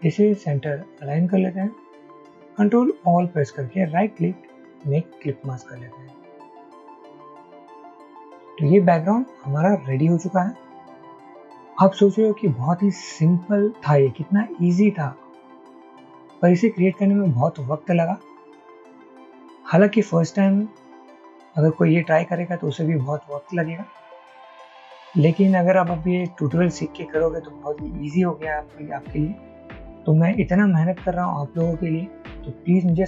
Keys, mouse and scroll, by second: 3.0 ctrl+a, 4.0 right click, 7.4 ctrl+0, 8.0 ctrl+-.